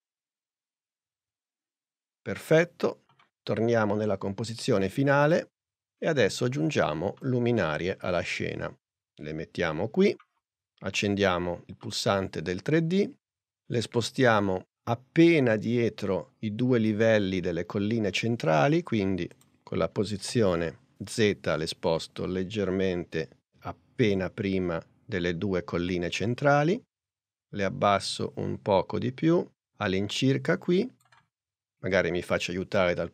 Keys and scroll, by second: 20.3 p.